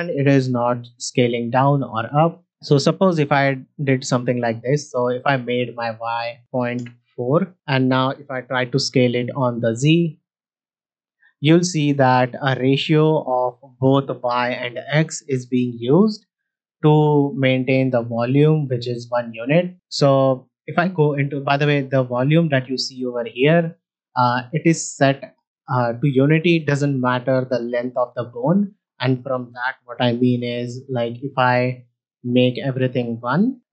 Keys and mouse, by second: 0.0 s, 5.8-7.2 drag, 8.8 s, 9.0 z, 16.5-17.5 drag, 17.5 middle drag, 20.5 Tab, 21.3 Tab, 32.4-33.5 drag.